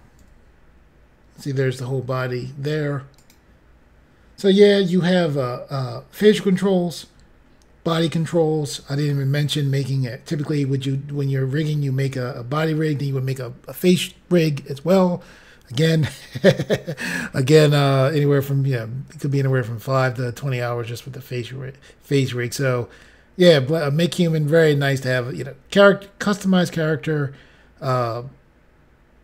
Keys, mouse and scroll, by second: 0.1 g, 3.1 right click, 3.7 scroll down 2, 4.9 scroll up 1, 6.6-7.0 scroll down 1.